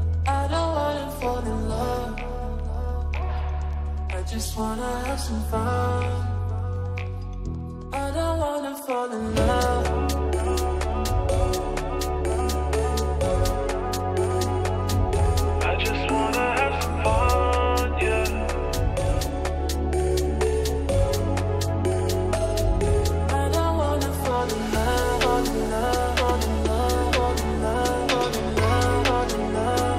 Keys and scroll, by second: 1.9 c, 2.1 Escape, 14.7 space, 20.6 Escape, 28.6 F3, 28.8 Escape.